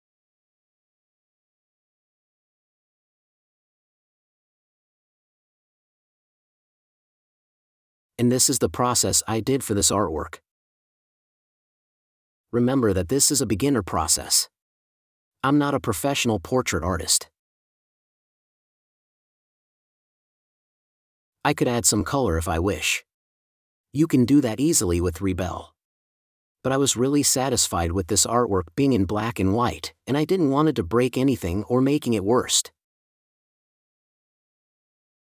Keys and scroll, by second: 3.6 space, 5.3 n, 10.8 space, 15.6 space, 17.4 super+space, 19.5 space, 27.1 space.